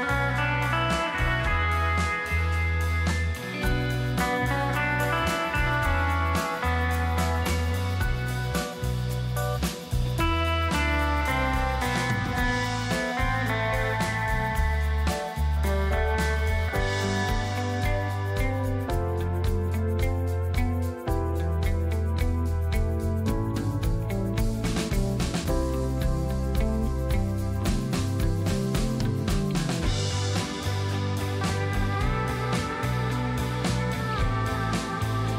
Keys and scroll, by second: 0.4 space, 3.8 ctrl+shift+KP_0, 4.8 space, 18.9 space, 26.4 Home, 26.7 BackSpace, 26.7 BackSpace, 26.9 BackSpace, 27.0 BackSpace, 32.7 Delete, 33.0 space.